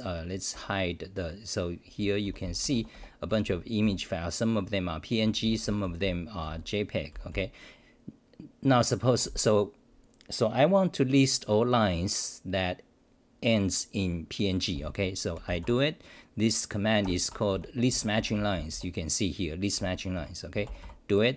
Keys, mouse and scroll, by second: 0.5 (, 2.2-5.2 typing, 15.4-16.1 typing, 17.0 ctrl+g, 17.3 Home, 17.5 w, 20.8 BackSpace.